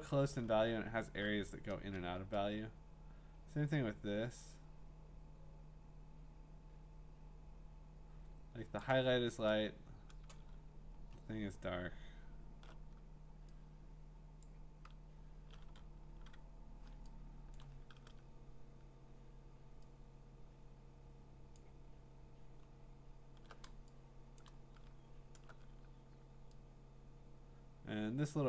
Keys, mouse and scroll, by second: 0.1 click, 0.7 scroll, 8.8 shift+click, 10.5-11.8 scroll, 14.4 middle click, 14.4 shift+click, 16.1-17.5 ctrl+z, 17.5 click, 17.8 shift+click, 20.3 click, 21.5 alt+click, 22.7-23.1 scroll, 24.4 click, 24.9-25.3 scroll.